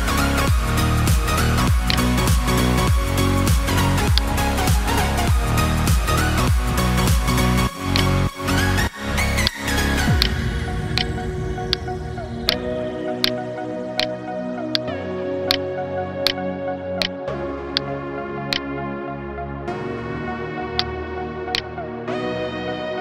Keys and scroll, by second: 1.6 space, 8.5 ctrl+space, 8.9 ctrl+space, 10.2 ctrl+space, 11.2 space.